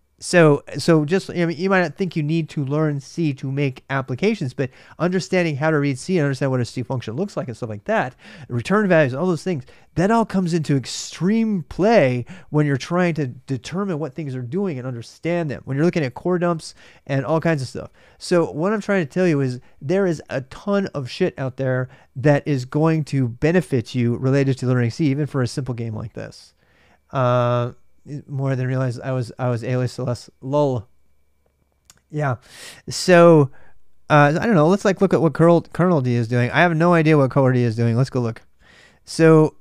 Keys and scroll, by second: 15.3 typing.